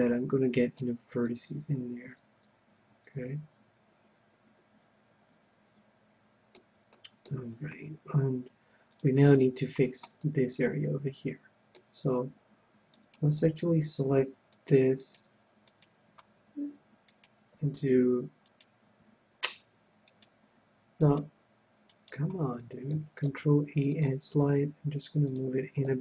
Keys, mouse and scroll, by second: 0.7-2.3 middle drag, 6.8-8.6 middle drag, 8.7-10.9 drag, 10.2-11.7 middle drag, 12.8-23.8 right drag, 23.2 ctrl+e, 25.4-26.0 drag, 25.9 a.